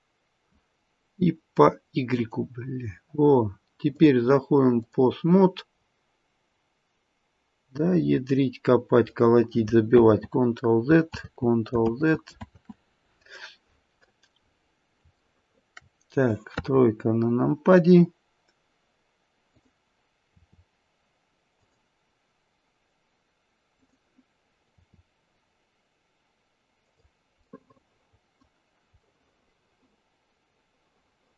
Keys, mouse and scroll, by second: 3.9 click, 5.7-6.5 scroll down 2, 6.5-6.9 scroll up 1, 10.5 ctrl+z, 11.1 ctrl+z, 14.4-15.2 scroll up 3, 15.2 shift+middle click, 15.2 scroll up 3, 16.5 shift+middle click, 16.5 KP_3, 17.5-18.0 scroll down 1, 19.4 click, 20.3 r, 23.7 click, 24.6 r, 27.4 middle click, 28.1 middle click, 29.1 middle click, 30.5 middle click, 31.0 middle click.